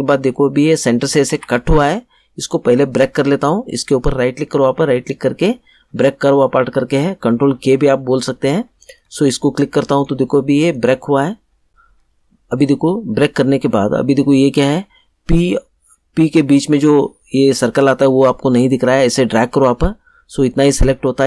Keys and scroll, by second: 1.3 ctrl+z.